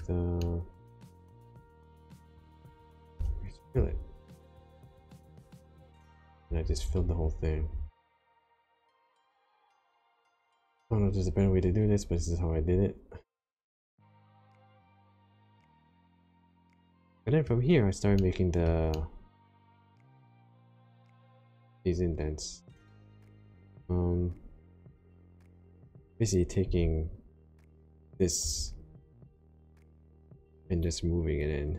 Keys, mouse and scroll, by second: 0.3 middle click, 1.7 shift+click, 3.1 f, 3.7 f, 4.9 click, 6.1-12.5 typing, 13.2 click, 13.9 click, 14.4 click, 14.7 click, 15.4 middle click, 18.1 shift+middle click, 19.0 middle click, 19.9 shift+middle click, 22.7 middle click, 24.9 click, 26.6 1, 28.4 2, 29.9 click.